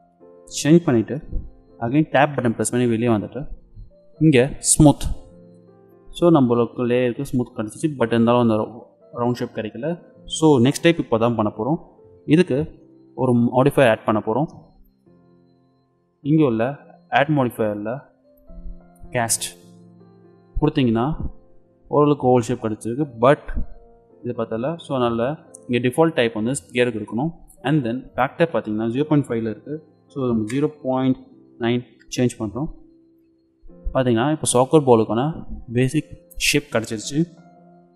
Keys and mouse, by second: 2.2 Tab, 4.7-5.9 drag, 5.9 middle click, 14.4-16.3 drag, 17.0-20.2 drag, 28.1-30.0 drag, 33.1-35.0 middle drag.